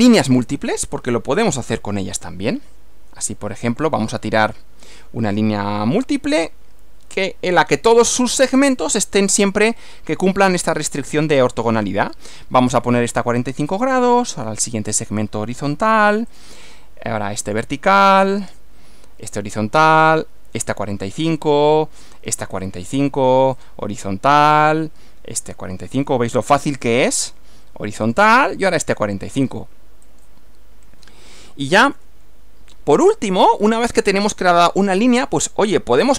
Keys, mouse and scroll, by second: 3.7 click, 9.4 click, 13.7 click, 16.3 click, 17.5 click, 19.3 click, 20.7 click, 22.5 click, 23.6 click, 26.5 click, 28.1 click, 30.1 click, 32.0 f, 33.5 scroll down 2.